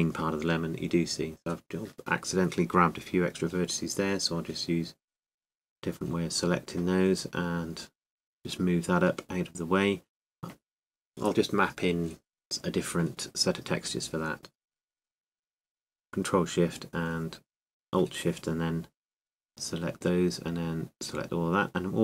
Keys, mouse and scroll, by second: 1.8 g, 8.1 g, 15.9 a, 21.6 c.